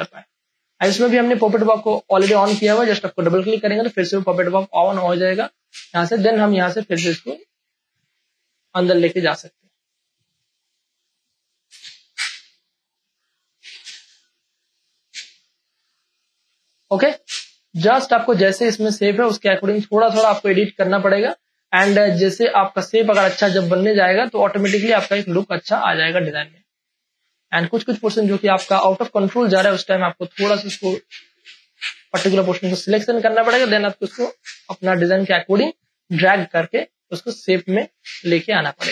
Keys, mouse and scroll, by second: 0.1 space, 0.4 ctrl+click, 1.1 scroll down 1, 1.8 click, 1.8 click, 4.3 space, 4.6 click, 4.6 click, 5.0 ctrl+click, 5.3 click, 5.6 ctrl+click, 7.0-9.0 drag, 9.0 space, 9.2 ctrl+click, 9.7 click, 10.7 space, 10.9 click, 11.2 space, 11.4 ctrl+click, 12.7-15.9 drag, 16.2 ctrl+click, 16.5 click, 17.1 ctrl+click, 18.5-20.2 drag, 20.4 ctrl+click, 21.7 click, 21.9-26.4 ctrl+drag, 26.4 space, 26.7 click, 27.1 space, 28.3-30.8 drag, 30.8 space, 31.1 ctrl+click, 32.4-35.3 drag, 35.3 space, 35.5 click, 36.1 ctrl+click.